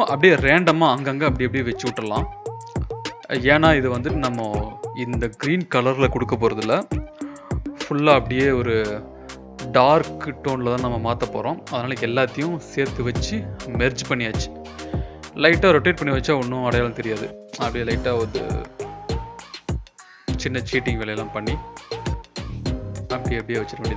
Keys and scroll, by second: 1.2 ctrl+t, 5.6 ctrl+t, 9.0 ctrl+e, 12.5 ctrl+t, 15.5 ctrl+t, 17.9 ctrl+t, 21.7 ctrl+t.